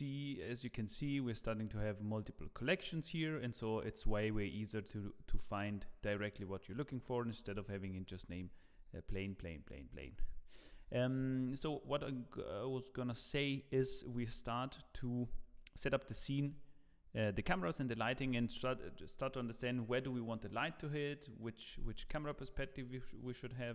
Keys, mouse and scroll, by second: 2.8 click, 7.3 scroll up 1, 7.7 shift+middle click, 8.1 scroll down 3, 8.7 click, 9.3 middle click, 10.5 scroll up 1, 10.8 shift+middle click, 22.6 middle click, 23.3-23.7 scroll up 1.